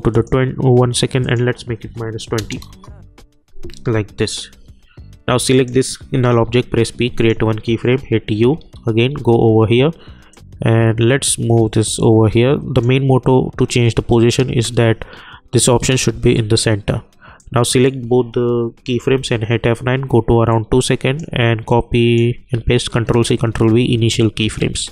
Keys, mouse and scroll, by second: 0.1 click, 1.8 -, 2.6 Return, 4.5 j, 5.5 click, 6.5 p, 7.2 click, 8.0-9.6 typing, 10.3-14.0 drag, 14.0 j, 14.5 space, 16.0-17.0 typing, 17.4-18.8 drag, 18.8 F9, 19.1 =, 20.5-22.5 drag, 22.5 ctrl+c, 23.1 ctrl+v, 24.2 click, 24.6 space.